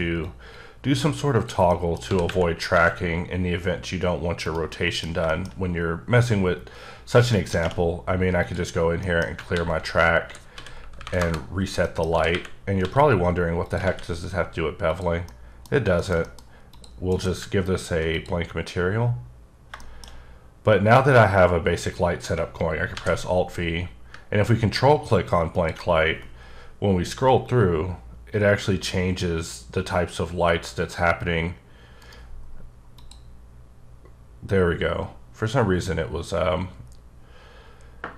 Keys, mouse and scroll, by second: 0.2 click, 1.7 middle click, 2.0 g, 2.2 y, 2.7 x, 4.4 right click, 4.7 middle click, 5.5-6.0 scroll up 2, 6.0-7.0 scroll down 1, 7.0 scroll down 1, 7.3 middle click, 8.4 click, 9.0 middle click, 9.5-11.1 typing, 11.2 KP_Enter, 11.8 middle click, 12.1 g, 12.3 y, 12.8 x, 13.6 click, 13.9 alt+a, 14.9 click, 15.3 middle click, 15.7 scroll up 1, 16.0 middle click, 16.2 double middle click, 16.7 click, 17.1 alt+m, 18.1 click, 18.6 scroll up 1, 19.7 shift+middle click, 20.1 scroll up 1, 20.5-22.3 scroll down 1, 22.9 alt+v, 25.5 ctrl+click, 26.7-27.2 scroll up 2, 27.2-27.6 scroll up 2, 27.6-28.2 scroll down 3, 28.2-28.8 scroll up 1, 28.8 scroll, 28.9 scroll down 2, 29.4-30.5 scroll up 3, 32.0 right click, 32.4-33.0 scroll down 2, 33.0 click, 33.4-34.1 scroll down 3, 34.1-35.2 scroll up 3, 35.2-35.8 scroll up 2, 36.5-37.0 scroll up 1, 37.0-38.0 scroll up 1, 38.0 scroll up 1.